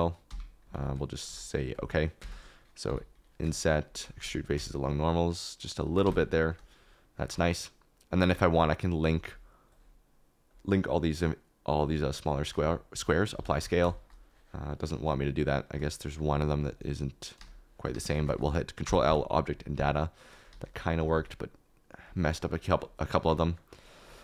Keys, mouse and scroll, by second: 0.7 ctrl+a, 2.2 Tab, 3.4 i, 4.1 alt+e, 5.8 shift+right click, 6.0 Tab, 6.3 middle click, 7.2 shift+middle click, 8.4 shift+click, 9.2 shift+click, 13.3 ctrl+a, 16.0 middle click, 18.8 ctrl+l, 20.9 s, 21.1 z, 22.3 KP_Decimal.